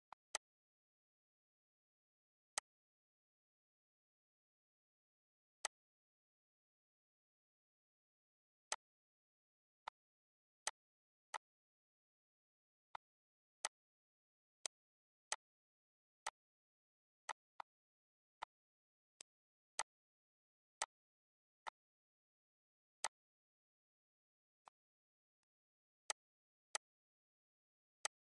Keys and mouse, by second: 0.0 click, 1.2 ctrl+s, 2.5 click, 5.6 click, 8.6 click, 9.8 click, 10.6 click, 11.2 click, 12.8 click, 13.5 click, 14.5 click, 15.2 click, 16.2 click, 17.2 click, 18.3 click, 19.1 click, 19.7 click, 20.8 click, 21.6 click, 23.0 click, 24.6 click, 25.4 click, 26.1 click, 26.7 click, 28.0 click.